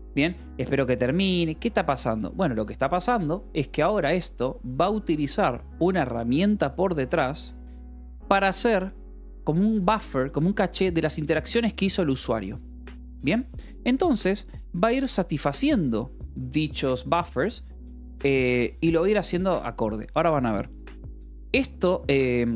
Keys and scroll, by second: 10.2 alt+o, 10.4 Escape, 10.7 :, 11.2 =, 12.3 k, 13.8 Return.